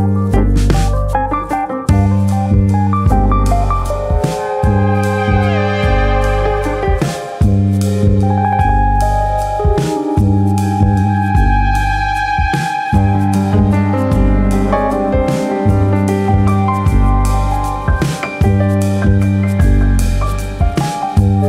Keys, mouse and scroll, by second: 0.3 shift+middle click, 0.9 click, 3.2 scroll up 1, 3.9 click, 6.3 click, 9.2-10.2 scroll down 1, 10.2 click, 10.2-11.3 scroll down 1, 11.3 shift+click, 11.7 shift+click, 12.9 KP_3, 14.5 click, 15.6 shift+click, 16.8 click, 17.8 click, 19.9 middle click, 21.1 KP_1.